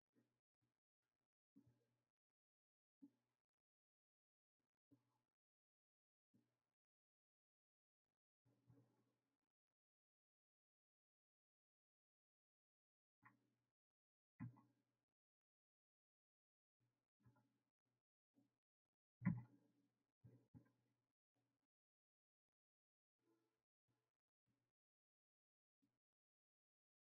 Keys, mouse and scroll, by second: 8.1 ctrl+z, 9.0 s, 24.2 drag.